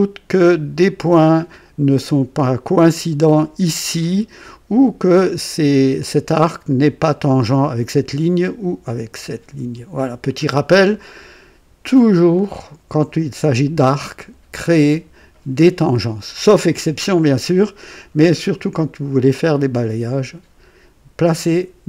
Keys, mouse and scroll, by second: 10.0 scroll up 1, 10.9 scroll down 2.